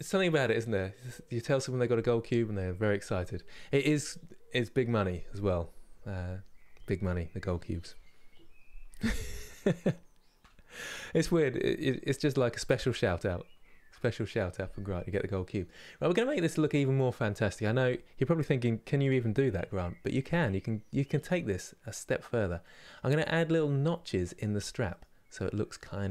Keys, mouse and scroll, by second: 14.6-15.7 middle drag, 15.7 scroll up 2, 16.4-19.2 scroll up 4, 20.8 middle click, 21.6-21.9 scroll up 2, 22.3 middle click, 22.9 scroll down 2, 24.6 middle click, 25.0 scroll up 1, 25.4 middle click.